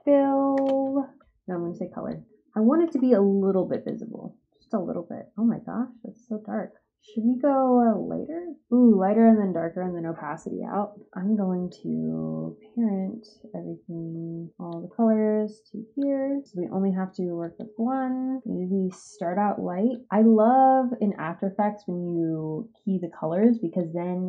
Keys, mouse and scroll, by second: 0.0-0.8 typing, 3.6 click, 8.6-11.0 drag, 11.6 click, 17.3 click, 19.9 click, 23.7 click.